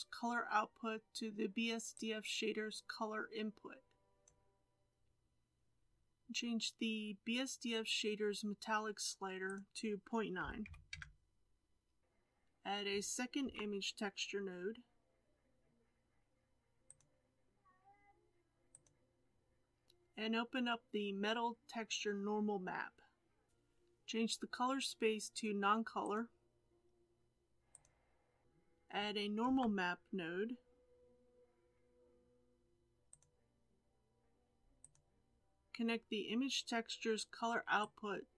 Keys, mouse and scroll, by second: 4.2 click, 5.7-9.9 scroll up 2, 10.9-23.5 drag, 27.7-38.3 drag.